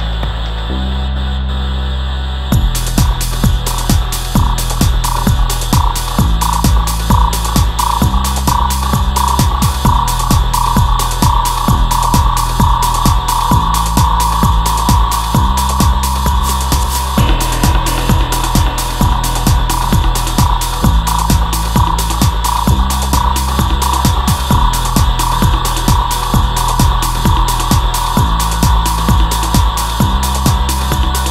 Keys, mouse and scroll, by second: 6.2 alt+a, 7.7 shift+Left, 11.1-12.8 right drag.